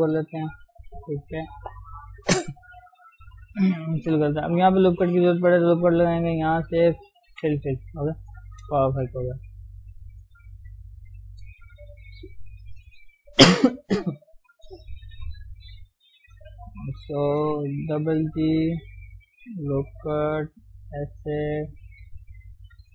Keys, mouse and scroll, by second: 0.7 KP_3, 2.9 click, 4.1 f, 5.4 ctrl+r, 6.4 click, 7.4 f, 7.6 f, 7.8 scroll down 1, 8.0 Tab, 8.3 scroll up 1, 8.5 shift+middle click, 8.9 scroll up 1, 9.1 middle click, 9.7 scroll up 1, 10.3 click, 10.5-14.7 middle drag, 14.7 KP_1, 15.1 KP_3, 15.4 scroll up 1, 16.1 shift+z, 16.2 shift+click, 17.3 shift+z, 17.9 g, 19.6 ctrl+r, 20.4 g, 21.9 click, 22.4 scroll down 1, 22.4-22.9 middle drag.